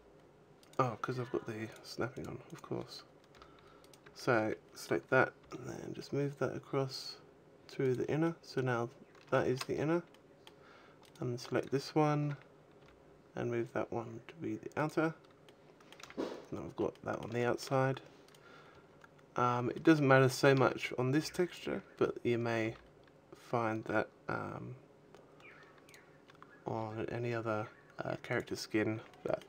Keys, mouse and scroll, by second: 0.5 right click, 1.5 click, 2.3 click, 3.2 g, 3.7 right click, 3.9 a, 4.2 a, 5.7 g, 7.8 click, 8.1 middle click, 9.2 shift+middle click, 10.0 middle click, 10.8 right click, 12.1 a, 12.6 g, 14.4 click, 15.1 middle click, 15.7 a, 17.2 shift+middle click, 18.1 right click, 18.7-19.2 scroll down 3, 19.2-19.6 scroll up 1, 19.6 shift+middle click, 20.1 shift+middle click, 20.5 scroll up 2, 21.0 b, 21.8-22.5 scroll up 2, 22.5 g, 25.8 click, 26.1-26.5 scroll up 2, 26.5 g, 28.5 click, 28.5 scroll down 2, 28.7 a, 28.9 middle click.